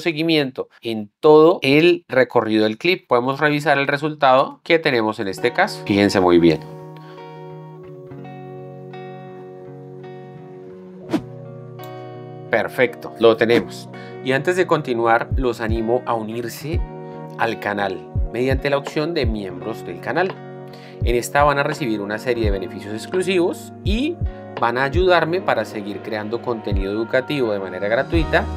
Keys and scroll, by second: 3.6 alt+s, 4.6 space.